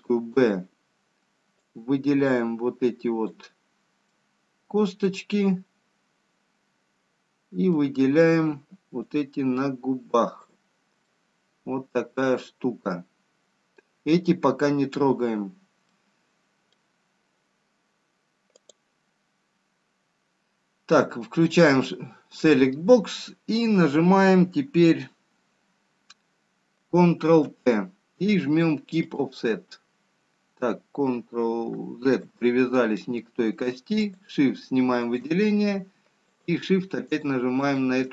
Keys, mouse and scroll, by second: 1.6 b, 5.0 middle click, 9.4 b, 11.7 middle click, 19.5 click, 27.6 ctrl+p, 34.5 shift+click, 35.4 shift+click.